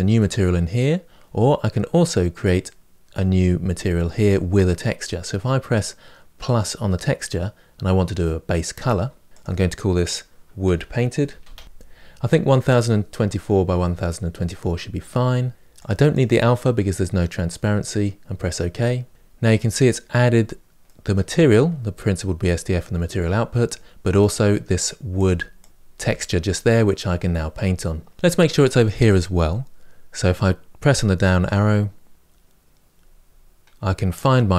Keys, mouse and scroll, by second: 15.9-25.0 drag, 29.1-34.5 drag.